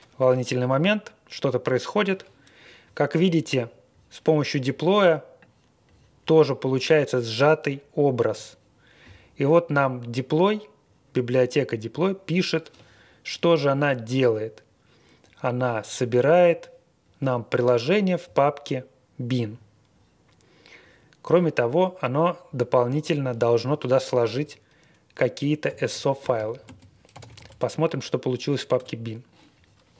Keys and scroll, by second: 25.6 ctrl+l, 26.2-27.8 typing, 28.8 Return.